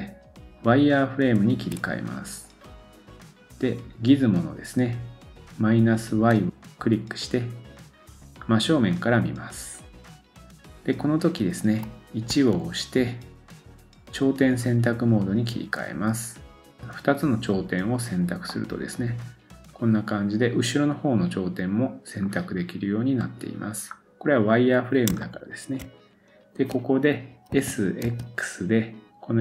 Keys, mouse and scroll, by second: 6.3 click, 8.4-8.9 scroll up 2, 12.3 1, 16.8-23.3 drag, 18.1-18.5 scroll down 1, 18.5 middle click, 23.3-25.1 middle drag, 23.9-25.1 scroll up 2, 25.2-29.4 shift+middle drag, 27.5 s.